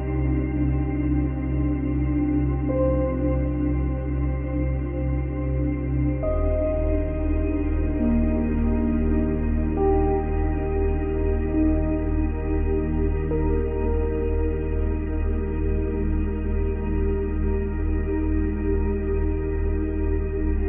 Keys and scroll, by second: 3.3 space, 4.2 space, 6.7 space, 7.4 space, 10.5 space, 11.3 space, 16.0 space.